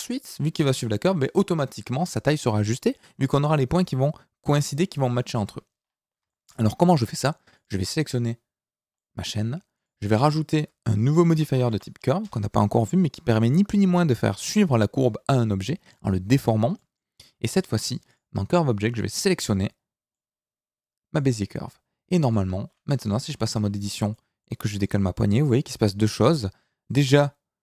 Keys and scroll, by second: 22.9 Tab, 24.7 g.